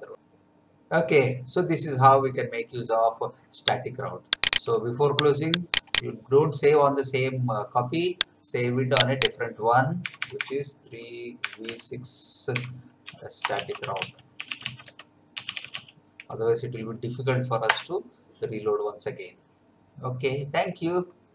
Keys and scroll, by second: 10.0 BackSpace, 11.7-16.2 typing, 17.7 Return.